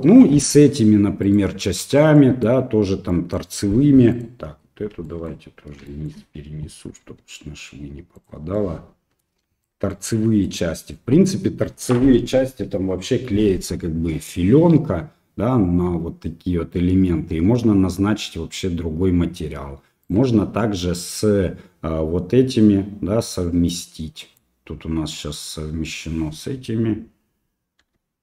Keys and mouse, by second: 0.4 middle click, 1.2 right click, 2.2 middle click, 3.1 middle click, 4.1 right click, 5.1 shift+middle click, 6.0 shift+middle click, 7.0 g, 8.6 middle click, 9.9 middle click, 20.0 right click, 23.8 middle click, 27.8 g.